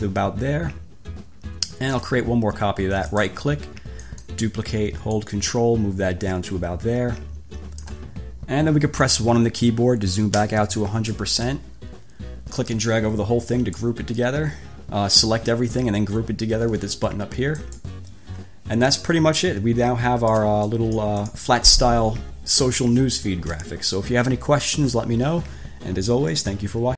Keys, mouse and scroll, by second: 3.2 right click, 4.2 click, 5.4-8.2 ctrl+drag, 10.6 1, 11.4 click, 12.8-14.2 drag, 17.8 click, 19.6-20.7 ctrl+shift+drag, 20.9 ctrl+shift+click, 26.5 click.